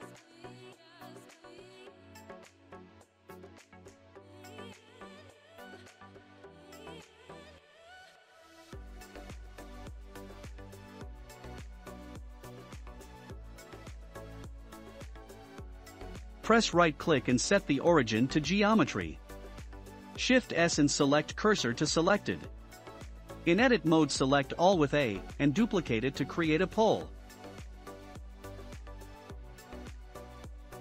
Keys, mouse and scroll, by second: 0.5 click, 1.4 click, 1.9-2.8 shift+middle drag, 2.8-3.1 scroll down 2, 3.4-3.8 scroll down 6, 3.9-5.2 shift+middle drag, 5.2-6.0 scroll up 5, 6.0-8.9 middle drag, 8.9-9.4 drag, 9.4-11.2 middle drag, 10.3 scroll up 1, 11.2 Tab, 11.2-11.7 scroll up 2, 11.7 scroll down 1, 12.6-14.5 middle drag, 13.1 Tab, 14.7-21.1 right drag, 21.1 shift+s, 23.6 Tab, 24.1 scroll up 1, 26.5-27.7 drag, 28.8 shift+d.